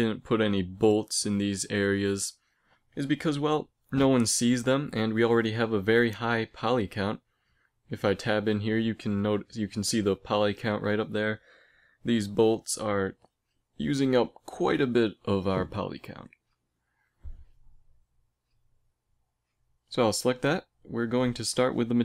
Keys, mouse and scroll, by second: 5.9-8.0 middle drag, 8.0-9.1 right drag, 9.1 Tab, 14.1 Tab, 17.5 a, 19.5-21.9 right drag, 21.2-22.0 drag.